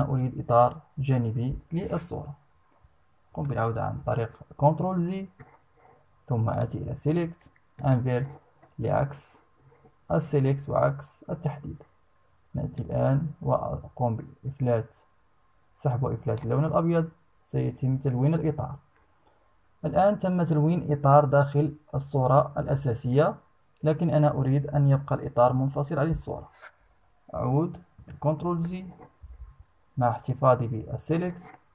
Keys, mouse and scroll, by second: 2.8 ctrl+z, 6.1 click, 7.3 click, 12.3-16.1 drag, 27.5 ctrl+z.